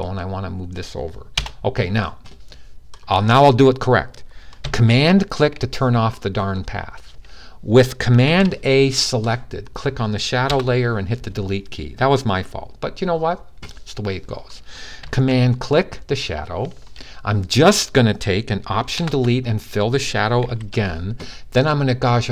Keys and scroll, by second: 8.0 super+a, 20.2 super+d.